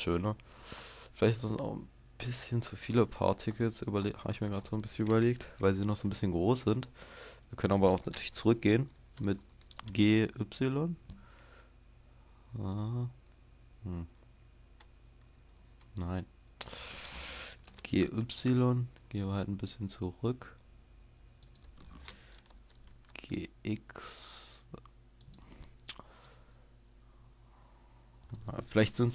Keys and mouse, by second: 0.0 Escape, 5.4 KP_0, 9.7 g, 17.8 g, 21.6-25.2 drag, 22.5 g, 25.4-28.0 drag.